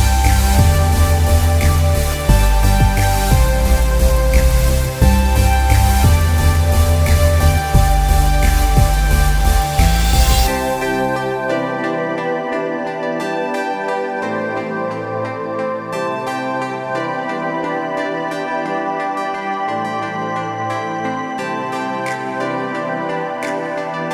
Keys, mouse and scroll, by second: 0.4 ctrl+Return, 1.3 ctrl+alt+q, 2.0 click, 5.7 Return, 6.6-9.3 ctrl+drag, 9.3 z, 9.7 click, 10.3 space, 11.1 ctrl+click, 11.6 ctrl+t, 12.2-15.9 shift+drag, 15.9 ctrl+t, 16.4-20.7 shift+drag, 20.7 Return, 22.4-23.9 ctrl+drag.